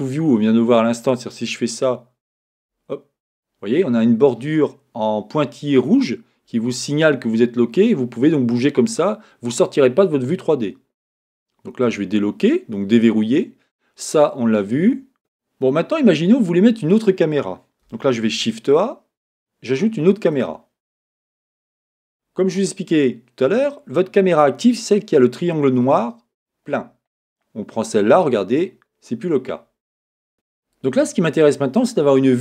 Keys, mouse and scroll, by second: 1.6 KP_0, 2.5 KP_0, 7.7-13.4 middle drag, 13.4 click, 15.2-18.2 middle drag, 18.2 shift+a, 21.5-25.4 middle drag, 26.6-29.3 middle drag, 29.3 click, 30.3-32.4 middle drag.